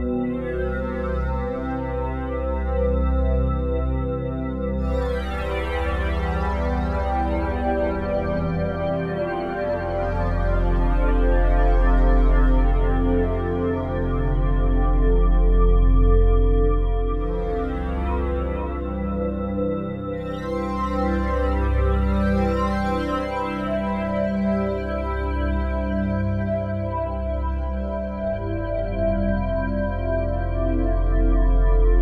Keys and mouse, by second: 0.0-0.7 typing, 0.7 Return, 1.9 click, 2.1 click, 2.3 click, 2.6-3.7 drag, 2.7-4.8 typing, 6.1-7.3 typing, 8.1-14.9 Left, 8.4-9.2 typing, 9.7 Return, 11.0-13.9 drag, 13.9 1, 14.4-15.4 ctrl+alt+drag, 15.2 Tab, 15.4 middle click, 16.0-18.4 ctrl+alt+drag, 18.6-22.4 ctrl+alt+drag, 19.3 Tab, 22.9-25.5 alt+drag, 23.3-24.0 typing, 25.3-26.0 typing, 25.9 ctrl+alt+click, 26.5 alt+shift+click, 27.7 ctrl+alt+click, 28.9-29.6 typing, 29.3 alt+shift+click, 30.2 ctrl+alt+click, 30.6-31.4 typing, 31.4-32.0 ctrl+alt+shift+drag.